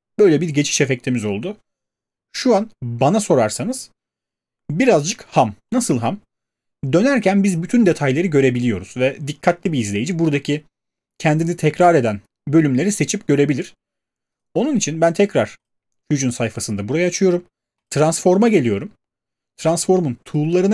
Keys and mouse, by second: 9.4 click, 14.4 click, 15.7 click, 17.9 right click, 20.3 click.